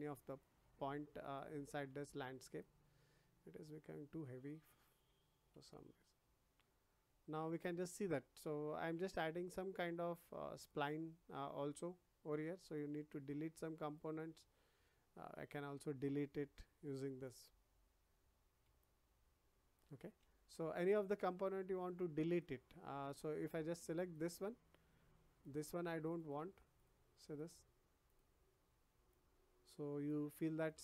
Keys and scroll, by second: 20.2 ctrl+z.